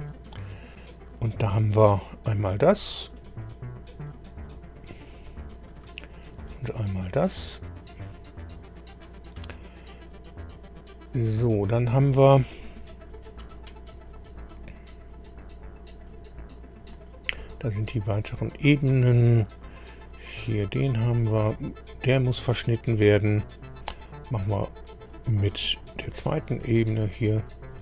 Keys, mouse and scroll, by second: 4.4 click, 5.7 click, 7.4 click, 8.6-8.9 scroll down 2, 10.4-11.0 scroll up 2, 11.7-12.0 scroll up 2, 12.8 scroll down 2, 15.2 scroll up 2, 16.1-16.5 scroll down 2, 16.7-17.1 scroll down 2, 17.9 scroll up 2, 19.2 click, 20.9 click, 23.9-24.2 scroll up 1, 25.0-25.4 scroll down 1, 27.4 ctrl+click.